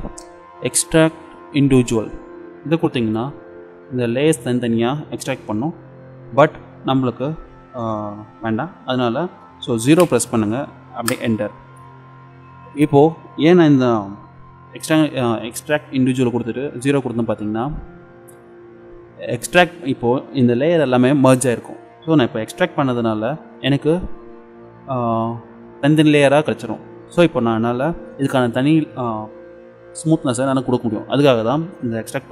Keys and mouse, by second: 1.6-3.6 drag, 3.6 middle click, 3.9 middle click, 5.3 middle click.